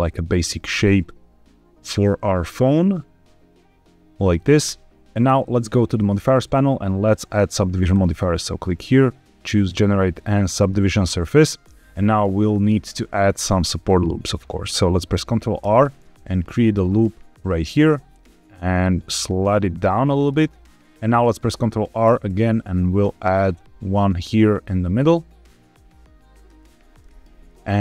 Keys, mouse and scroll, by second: 4.1 click, 5.1 shift+middle click, 5.8 click, 7.8-10.6 drag, 15.6 ctrl+r, 20.1 click, 20.7 ctrl+z, 20.7 middle click, 22.0 ctrl+r, 26.3 click, 26.9 middle click, 27.7 ctrl+r.